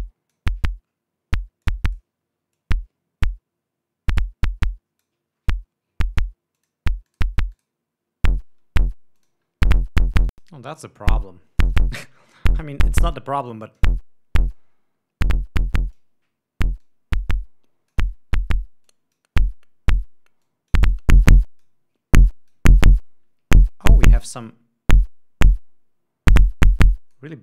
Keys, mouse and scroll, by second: 0.5 click, 2.1-2.6 drag, 3.0-5.7 drag, 7.1 click, 7.6 click, 8.0 click, 9.7-11.0 drag, 12.0 click, 13.9 click, 14.9-16.6 drag, 17.3-18.5 drag, 19.3 click, 20.9-22.3 drag, 22.6 click, 24.6-27.4 drag.